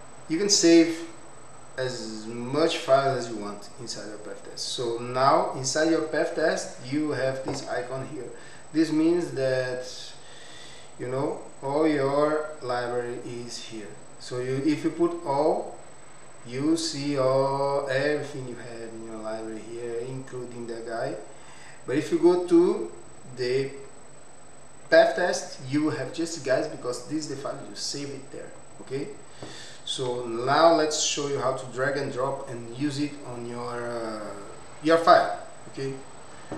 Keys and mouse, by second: 5.5 click, 8.5-10.8 drag, 12.2-12.7 drag, 15.4-16.8 drag, 18.2-23.1 drag, 24.0-25.0 drag, 28.5 click.